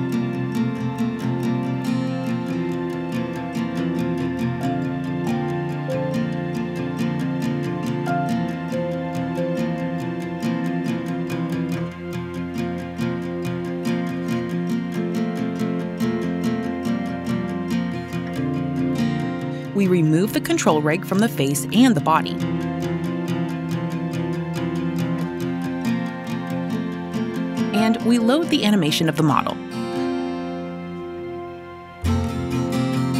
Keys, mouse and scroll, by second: 1.3-2.5 drag, 19.8 click, 21.1 Delete, 23.3 click, 24.2 Delete, 25.8 click, 27.0 click, 30.0 click, 30.9-31.8 typing, 32.8 click.